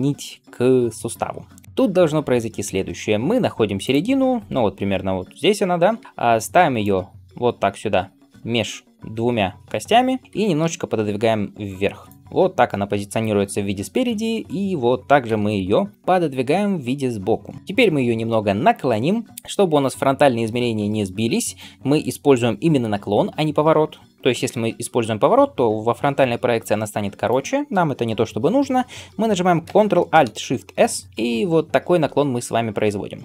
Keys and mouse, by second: 1.6 g, 5.9 g, 10.2 g, 12.2 l, 13.9 KP_3, 15.1 g, 24.6 r, 30.7 ctrl+alt+shift+s.